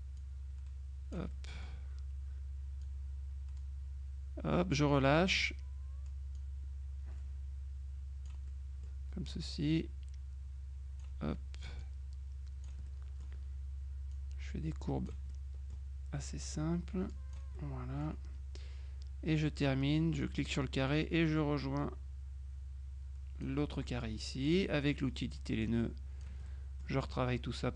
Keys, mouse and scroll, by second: 0.3-1.7 drag, 1.4 right click, 2.9-5.3 drag, 5.1 right click, 6.5-8.9 drag, 8.6 right click, 9.5-11.6 drag, 11.9-13.2 drag, 12.9 middle click, 14.2-15.7 drag, 16.5-17.9 drag, 20.7-24.0 drag, 24.5 click, 25.7 click.